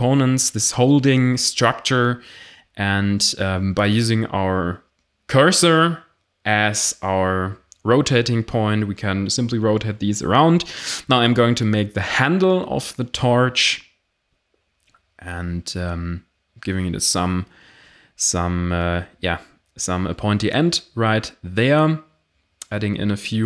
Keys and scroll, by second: 0.3 r, 1.4-6.5 typing, 2.3 ctrl+z, 3.0 Tab, 4.5 Tab, 7.8-10.9 typing, 8.8 Tab, 12.0 g, 12.0 z, 12.4 e, 12.7 s, 13.9-15.1 typing, 16.2-19.7 typing, 18.8 Tab, 20.9 1, 21.3 d, 21.4 z, 21.5 s, 23.2 a.